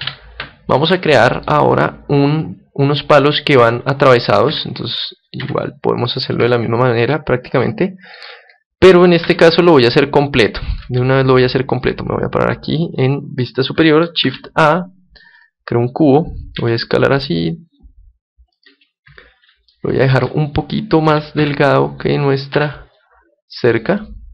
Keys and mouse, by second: 0.0 Escape, 1.1-3.0 middle drag, 4.5 KP_1, 5.4 KP_3, 6.4 KP_7, 7.7-9.5 middle drag, 9.2 z, 10.4-12.8 middle drag, 11.7-14.9 drag, 14.2 shift+a, 16.5 s, 18.6-20.4 drag, 19.7-21.4 middle drag, 21.1 s, 23.9-24.3 drag.